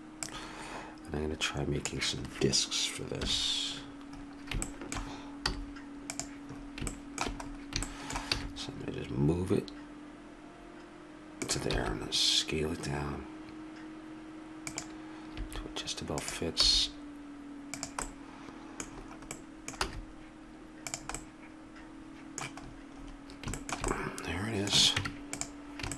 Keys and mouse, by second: 0.2-2.1 drag, 3.2 KP_1, 5.5 z, 8.4 g, 11.8 s, 15.4 s, 16.6 g, 18.2 middle click, 19.8 z, 22.9 middle click, 25.0 Tab.